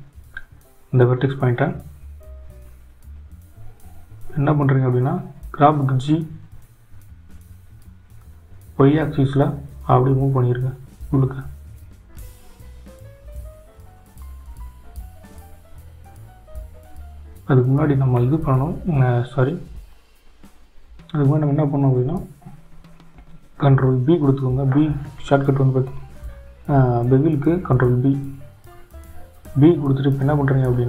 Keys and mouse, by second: 1.0 click, 3.5 click, 23.2 ctrl+b.